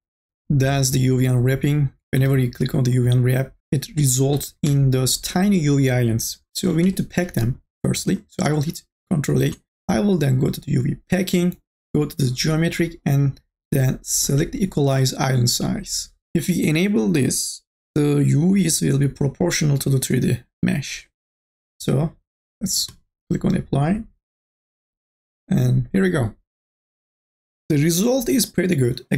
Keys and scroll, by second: 4.2-5.1 typing, 9.7 ctrl+a.